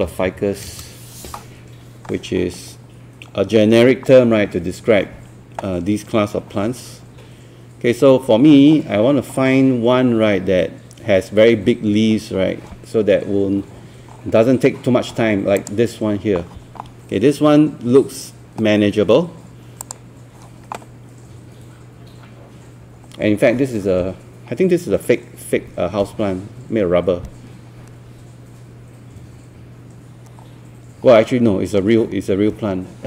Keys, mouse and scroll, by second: 0.0-0.7 typing, 2.7 scroll down 1, 3.4 scroll up 1, 6.6 scroll down 1, 8.1 scroll up 1, 8.7 scroll down 1, 11.2 scroll up 1, 13.8 scroll down 1, 15.6 click, 22.4-22.8 scroll down 1, 23.2 scroll up 1, 24.5-25.0 scroll down 1, 25.0 scroll up 1, 30.4 scroll down 1.